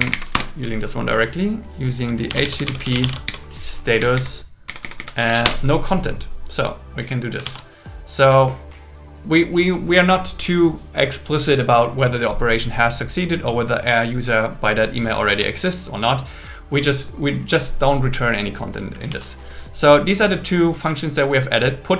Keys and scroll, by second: 0.0 Up, 0.3 Return, 2.3 shift+h, 2.8 shift+s, 4.1 Down, 5.0 Down, 5.4 Return, 7.4 super+s, 15.3 super+s, 19.1 super+s.